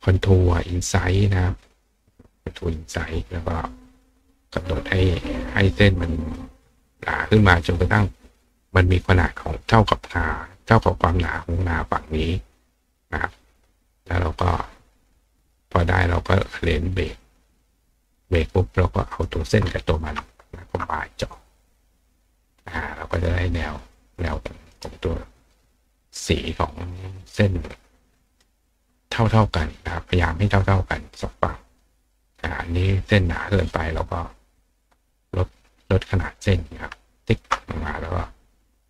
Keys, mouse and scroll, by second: 2.1 click, 4.0 click, 5.1 click, 6.3 click, 6.6 click, 6.8 click, 7.1 click, 7.3 click, 7.6 click, 15.8 click, 17.0 click, 18.0 click, 18.4 click, 19.1 click, 20.5 shift+click, 21.5 click, 22.1 click, 22.6 click, 23.8 click, 24.1 right click, 24.7 right click, 27.7 click, 31.8 click, 33.5 click, 34.2 click, 35.9 click, 37.2 ctrl+shift+click.